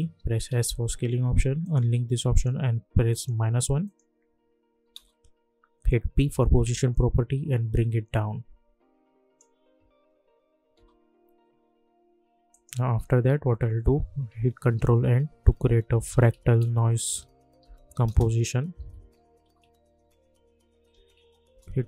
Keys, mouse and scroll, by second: 0.5 s, 1.6 click, 4.7 -, 4.9 Return, 6.0 p, 6.7-9.7 drag, 9.7 space, 12.5 click, 14.7 ctrl+n, 15.8-21.4 typing, 21.4 Return.